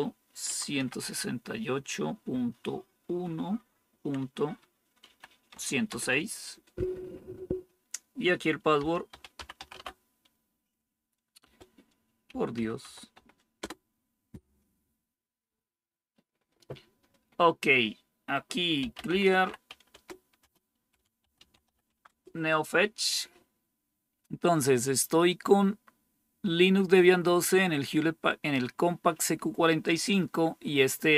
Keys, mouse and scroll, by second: 0.0-1.4 typing, 2.9-5.4 typing, 5.8 Return, 8.4-10.1 typing, 11.9-13.5 typing, 18.5-22.1 typing.